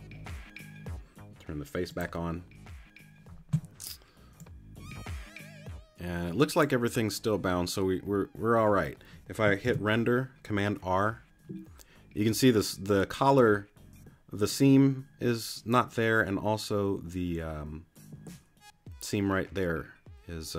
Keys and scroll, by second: 9.6 super+r.